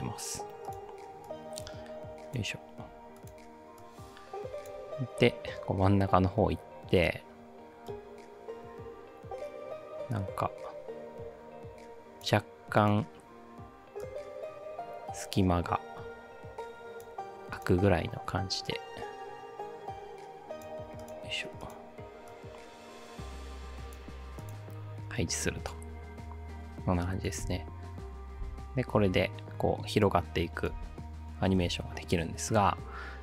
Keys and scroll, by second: 27.5 space, 28.4 space, 30.7 space, 31.6 space.